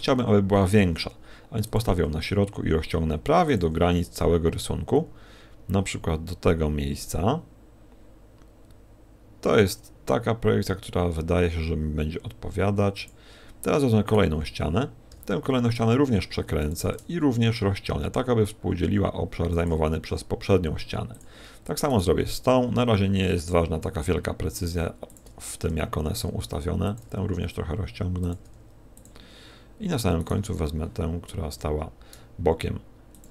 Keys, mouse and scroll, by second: 0.1 a, 0.9 g, 1.9 s, 3.6 click, 3.6 g, 13.5 click, 14.1 right click, 15.1 r, 17.1 ctrl+click, 17.1 s, 18.3 s, 19.6 g, 21.4 click, 21.9 right click, 23.2 r, 25.7 ctrl+click, 25.7 g, 27.1 s, 28.5 click, 28.5 g, 29.2 click, 30.2 right click, 31.5 r.